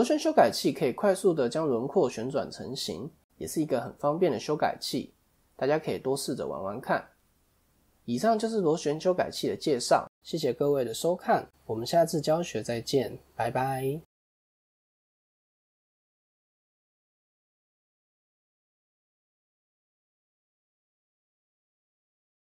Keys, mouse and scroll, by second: 2.7 l, 2.8 l, 4.9 click.